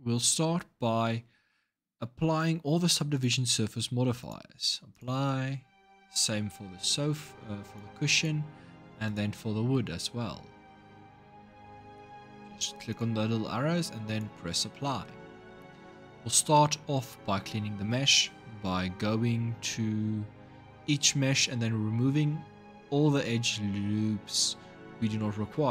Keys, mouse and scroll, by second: 2.9-4.8 drag, 7.4-8.9 drag, 12.7-16.2 drag.